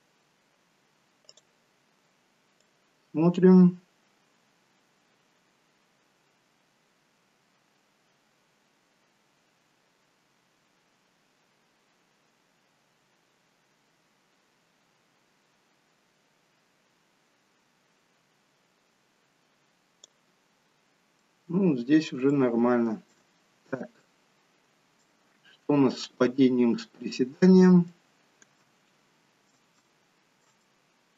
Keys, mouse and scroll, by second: 1.3 click, 20.5-21.1 scroll down 1, 21.1 middle click, 21.1-22.3 scroll down 2, 22.3 shift+middle click, 23.3 scroll down 1, 24.0 middle click, 26.2 scroll down 1, 26.8 middle click, 26.8 scroll down 1, 29.6 middle click, 29.8 shift+middle click, 30.6 shift+middle click.